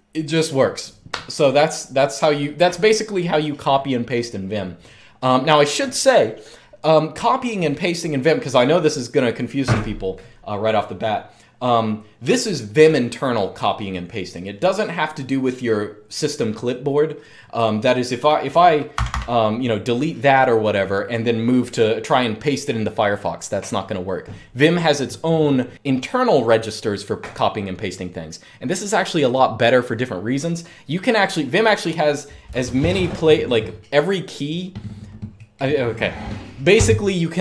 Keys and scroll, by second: 18.6 typing.